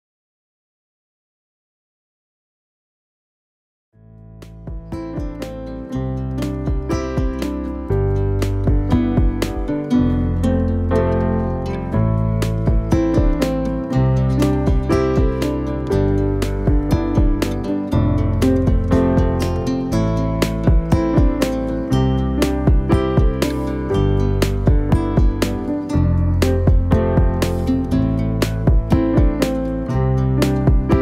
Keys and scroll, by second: 0.5-1.5 typing, 5.2 5, 7.9 Return, 21.0-23.6 typing, 24.4 Return, 28.7 b, 29.8-30.9 typing.